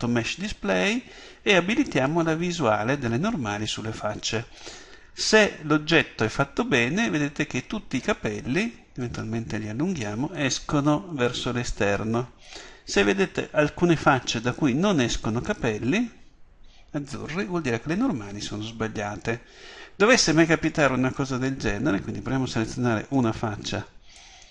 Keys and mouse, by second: 11.5-13.2 middle drag, 23.1-24.5 drag.